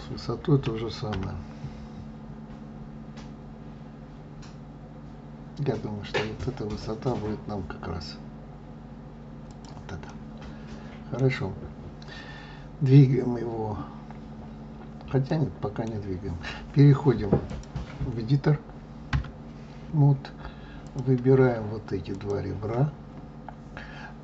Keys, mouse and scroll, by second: 0.6 s, 10.0-12.5 middle drag, 12.5-12.8 scroll up 2, 12.8-14.2 scroll down 2, 15.2-17.4 middle drag, 17.4 click, 19.0 Tab, 20.7 click, 22.0 shift+click.